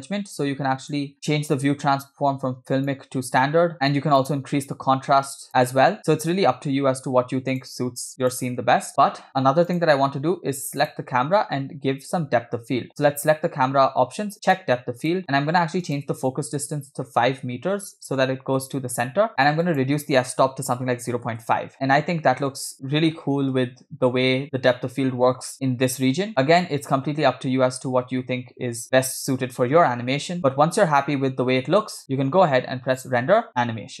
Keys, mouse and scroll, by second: 0.5 scroll down 1, 0.9 drag, 1.3 scroll down 1, 1.6-3.1 drag, 4.2-5.5 drag, 7.6-8.7 drag, 9.7 click, 10.8 click, 12.9 click, 14.5 click, 15.1 click, 15.9-18.3 drag, 19.7-21.5 drag, 21.8-23.5 typing, 26.1 space, 26.7 space, 27.1 space, 28.9 space, 29.1 space, 29.5 space, 30.5 space, 30.7 space, 31.3 space, 31.9 space, 33.0-34.0 drag.